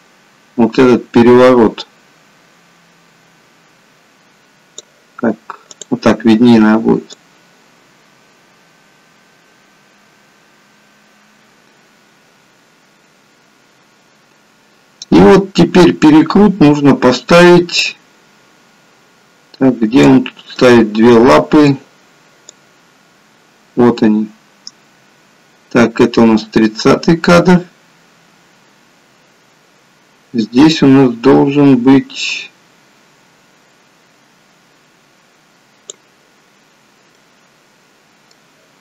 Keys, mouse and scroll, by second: 5.8 click, 7.4 click, 20.5 middle click, 22.7 click, 37.2 middle click.